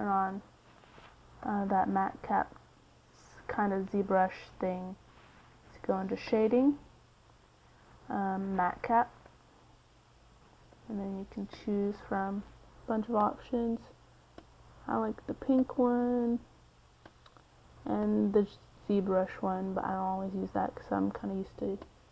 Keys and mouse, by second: 0.2 n, 1.4-2.6 drag, 5.5-8.2 drag, 9.7-14.3 drag, 15.1 middle click, 18.6 middle click.